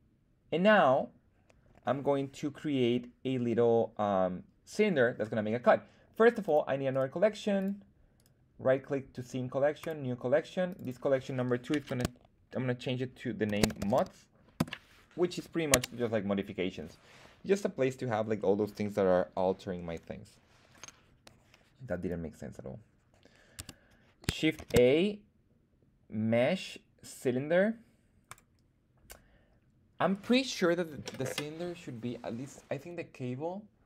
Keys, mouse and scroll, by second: 6.3 click, 6.8-7.4 drag, 6.8 right click, 7.5 click, 8.1-9.8 drag, 8.1 right click, 10.6 click, 10.7-15.0 drag, 21.9 click, 21.9 right click, 23.5 Tab, 24.5 shift+a, 30.0-33.8 drag.